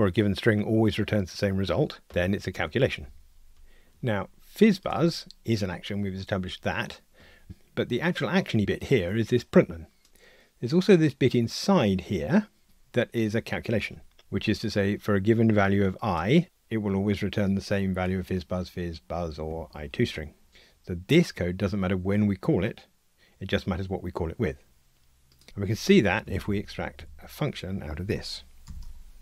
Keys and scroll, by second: 26.3 alt+Up, 28.6 alt+super+m.